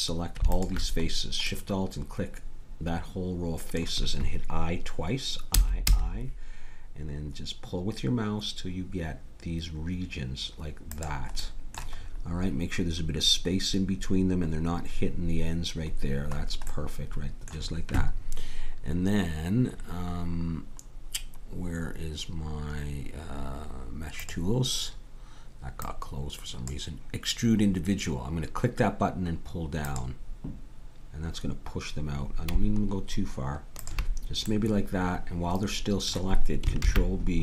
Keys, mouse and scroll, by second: 0.6 click, 1.5 middle click, 2.9 middle click, 5.6 i, 11.4-18.5 middle drag, 24.2-29.8 drag, 29.9-31.7 drag, 34.5-36.8 middle drag, 36.8 ctrl+b.